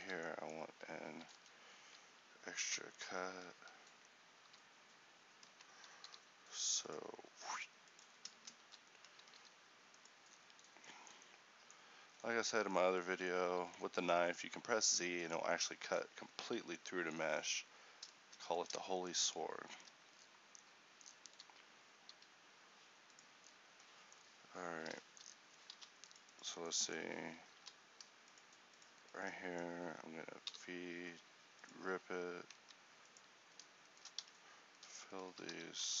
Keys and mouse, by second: 0.0-2.7 typing, 6.1 k, 8.6 z, 9.3 g, 12.9-14.1 middle drag, 14.1 g, 17.6-21.5 middle drag, 21.5 g, 25.1 middle click, 25.9 ctrl+r, 30.6 v, 32.7 ctrl+t, 34.3 f.